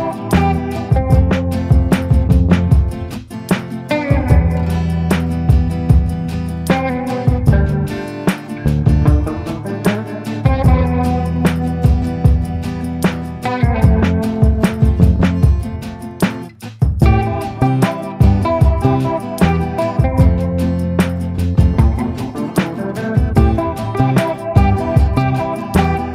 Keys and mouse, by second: 7.0-8.9 middle drag, 10.5 right click, 11.1-14.1 right drag, 15.8 click, 16.4 click, 16.9 click, 17.3 click, 17.7 click, 18.3 click, 18.7 click, 19.6 ctrl+z, 20.3 click, 20.9 click, 21.6 ctrl+z, 21.9 click, 22.5 click, 23.0 click, 23.4 click, 24.3 click, 25.1 right click, 25.8 a.